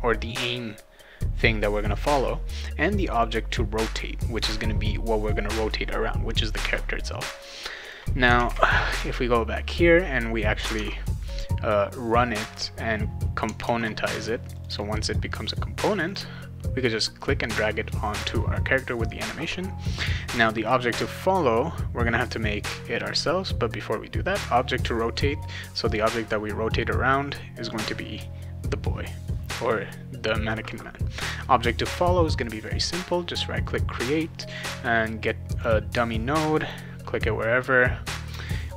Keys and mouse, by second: 2.9 click, 3.1 click, 7.4 click, 7.8 click, 8.3 alt+Tab, 10.7 alt+Tab, 13.6 alt+Tab, 14.5 click, 14.7 click, 16.1 click, 25.2-26.7 drag, 32.3 right click, 35.6 click, 36.6 click, 38.4 click, 38.6 click.